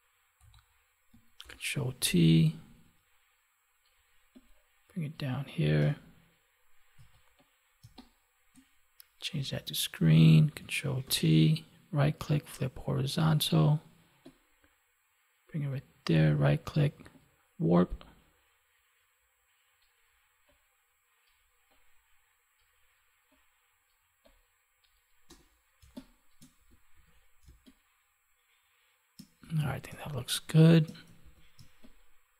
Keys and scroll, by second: 1.3 ctrl+t, 7.8 space, 11.0 ctrl+t, 25.7 space, 29.6 ctrl+s, 29.8 space, 31.2 ctrl+s, 31.6 space.